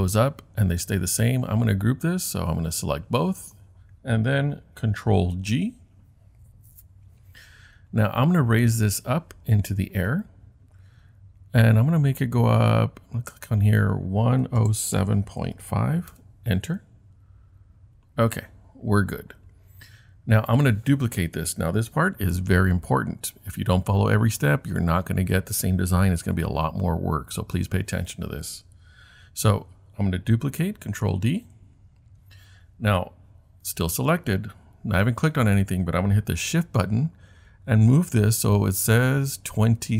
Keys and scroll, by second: 5.3 super+g, 14.1-16.1 typing, 16.1 Return, 31.4 super+d.